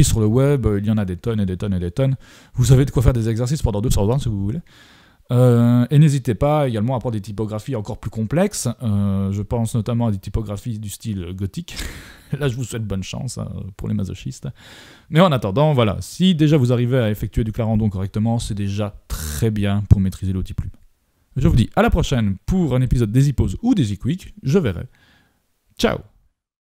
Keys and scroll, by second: 22.9 super+y.